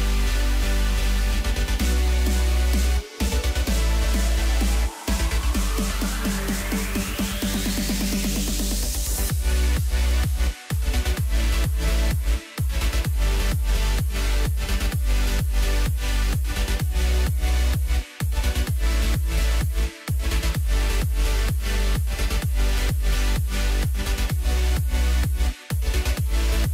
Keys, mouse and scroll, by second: 0.8 KP_0, 2.4-3.3 scroll down 1, 3.3 click, 3.8-4.6 scroll down 2, 4.6 g, 7.2-9.9 middle drag, 9.9-11.3 scroll up 1, 11.3 ctrl+alt+KP_0, 12.9 click, 13.9-15.6 drag, 15.6-16.4 scroll up 2, 16.4-17.4 scroll up 1, 17.4 click, 18.5 KP_1, 19.4-22.5 middle drag, 23.8 KP_1, 24.5 KP_3, 25.3-26.7 middle drag.